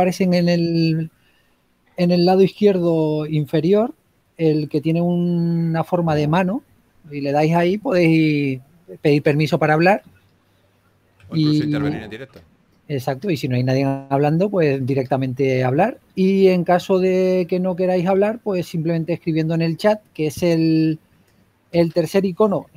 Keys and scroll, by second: 1.9 typing, 13.4 s, 18.9 s.